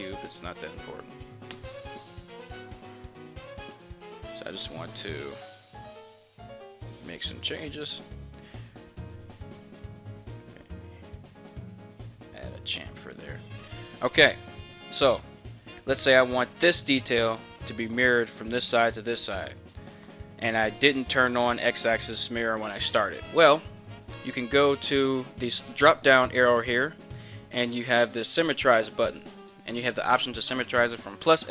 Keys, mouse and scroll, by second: 14.6-31.5 middle drag.